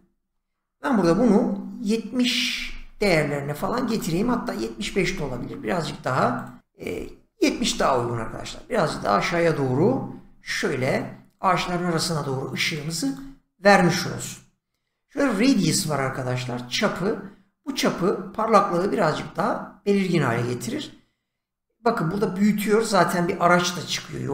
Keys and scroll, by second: 1.0 7, 2.8 Return, 4.3-5.3 typing, 6.9-7.3 typing, 7.5 Return, 10.1 shift+,.